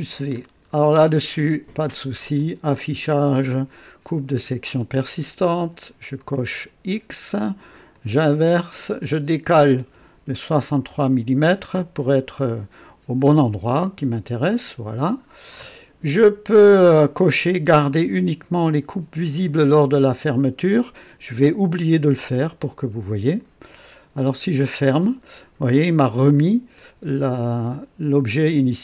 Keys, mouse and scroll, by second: 0.4-0.7 ctrl+scroll down 3, 0.7 scroll up 1, 2.3 click, 4.1 click, 6.1 click, 7.9 click, 9.0 click, 10.5 6, 10.5 KP_6, 10.8 KP_3, 11.7 KP_Enter, 13.8-15.9 drag, 16.1-17.0 right drag, 23.3 click, 27.4 click.